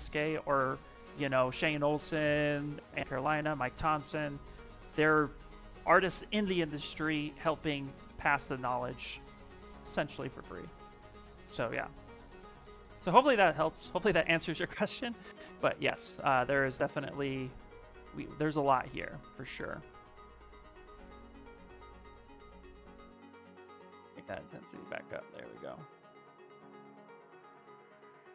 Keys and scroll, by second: 11.9 s, 15.1 space, 17.2 s, 20.7 space, 26.0 space.